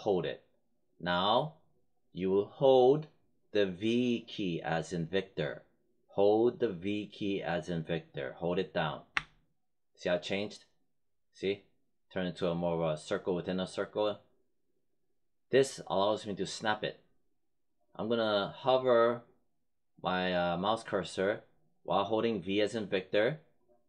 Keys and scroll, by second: 9.1 v.